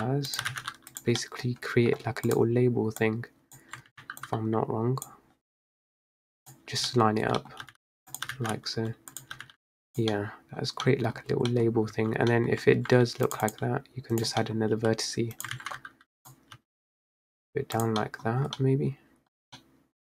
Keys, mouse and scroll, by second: 0.5 g, 1.3-2.4 middle drag, 2.4 click, 4.0 ctrl+z, 4.3 click, 6.0-7.0 drag, 7.0 middle click, 7.1-7.5 scroll down 1, 7.5 middle click, 7.7 g, 8.3 g, 9.4 g, 10.2-10.7 middle drag, 10.7-11.6 scroll down 3, 10.9-11.2 middle drag, 11.6 middle drag, 11.7 scroll up 3, 12.0 Tab, 12.4 middle click, 12.9 ctrl+r, 14.2 click, 14.6 middle click, 14.8 g, 15.6 ctrl+z, 16.3 click, 16.7 g, 18.1 middle click, 18.3 scroll down 1, 18.5 Tab, 18.7-19.4 middle drag, 19.4 scroll down 1, 19.7-20.1 middle drag.